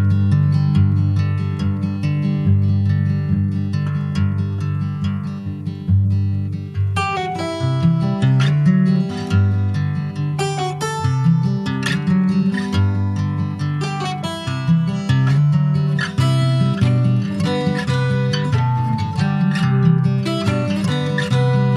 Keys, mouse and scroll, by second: 0.0 alt+shift+click, 0.5 middle click, 1.3 alt+shift+click, 1.7-2.9 middle drag, 2.9 alt+shift+click, 3.4-4.6 middle drag, 4.6 ctrl+s, 5.8 alt+s, 8.6-9.9 drag, 9.9 alt+s, 13.0 g, 15.8-16.9 middle drag, 16.9 ctrl+s, 17.8-18.8 drag, 18.8 shift+middle click, 19.7 ctrl+b.